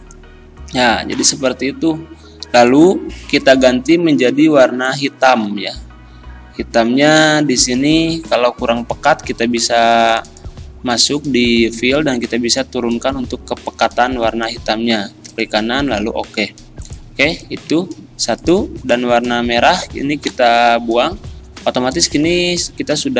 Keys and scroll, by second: 20.3 Delete.